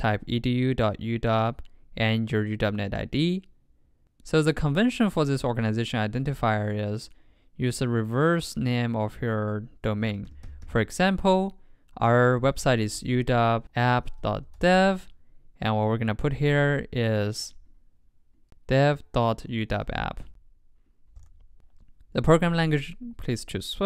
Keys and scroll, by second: 18.8 super+x, 19.5 super+v.